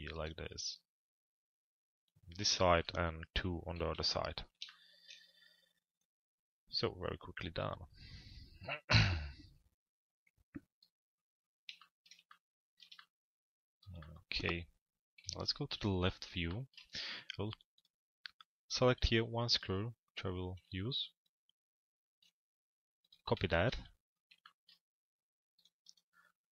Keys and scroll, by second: 3.6 p, 14.8 l, 15.7 z.